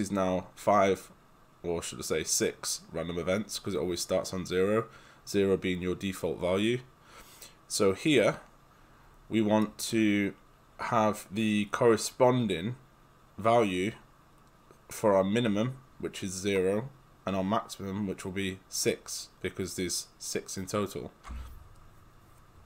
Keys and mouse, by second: 0.7 click, 9.6 right click.